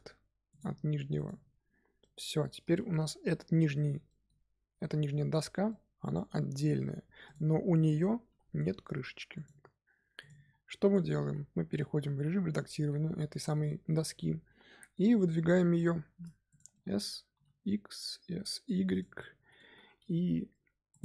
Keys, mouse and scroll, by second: 0.4 click, 1.1 click, 1.9-3.2 middle drag, 3.2-3.7 scroll up 2, 4.0-7.2 middle drag, 7.2 click, 8.2 g, 10.1 click, 10.4-10.9 scroll down 1, 10.9 Tab, 11.2 a, 11.6-12.8 middle drag, 12.8-13.3 scroll down 1, 13.3 shift+middle click, 14.2-14.6 scroll up 2, 14.6 middle click, 15.5 s, 16.7 middle click, 17.2 s, 19.1 middle click, 19.7 2, 20.8 click.